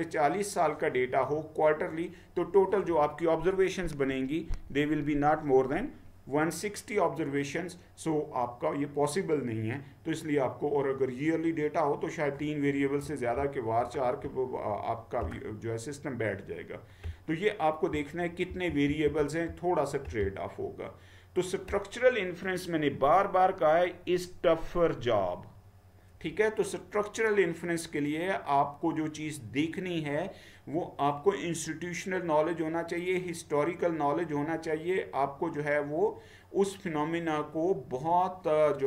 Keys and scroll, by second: 17.0-17.9 Down, 18.6 Down, 18.9 Down, 19.3 Down.